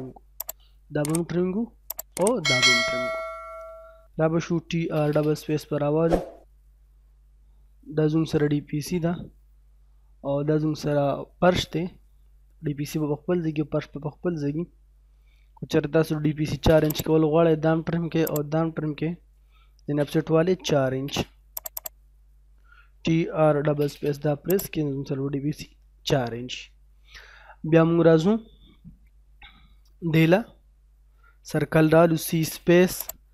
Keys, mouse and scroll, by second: 0.4 click, 0.7 scroll down 1, 1.9 click, 2.3 scroll down 1, 2.6 middle click, 4.2-5.1 typing, 5.3 scroll up 1, 7.4 middle click, 10.7-11.2 scroll down 1, 11.2 middle click, 11.2 middle click, 13.9-15.6 scroll up 1, 15.9-16.8 typing, 16.9 click, 18.3 click, 18.6 scroll down 1, 19.6-20.9 typing, 21.6 click, 23.0-23.9 typing, 23.9-24.6 scroll up 1, 24.6 click, 25.0-25.6 scroll down 1, 25.9-29.8 middle drag, 32.1 c, 32.2 space, 33.0 click.